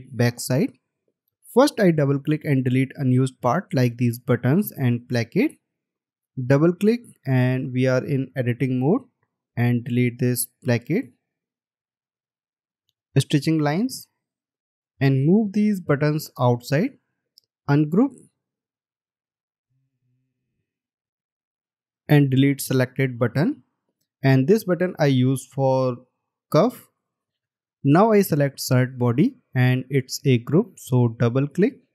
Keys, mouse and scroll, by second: 6.5 double click, 11.8 Delete, 17.4 right click, 23.9 Delete, 31.8 double click.